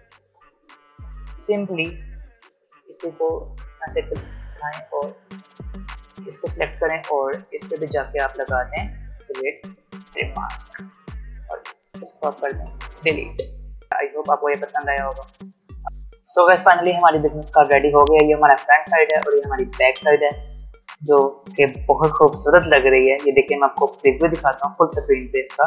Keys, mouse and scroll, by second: 1.2 alt+scroll down 1, 1.5 space, 1.7-6.2 drag, 20.4 click, 23.8-25.6 drag.